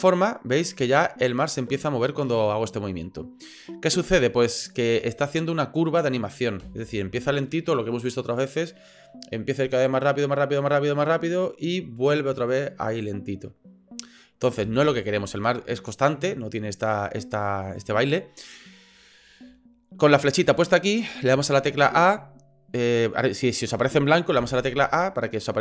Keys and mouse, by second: 6.6 space, 14.6 space, 21.3 a, 21.7 a, 24.4 a.